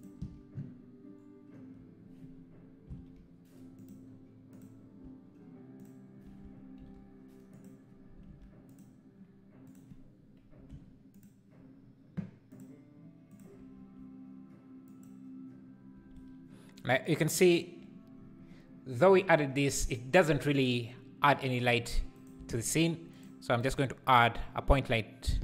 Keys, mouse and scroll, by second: 3.9 ctrl+l, 4.6 click, 5.8 shift+click, 7.6 ctrl+l, 8.3 alt+a, 8.8 click, 11.1 click, 13.4 click, 13.7 g, 16.1 alt+a, 22.1 shift+right click, 22.3 shift+a.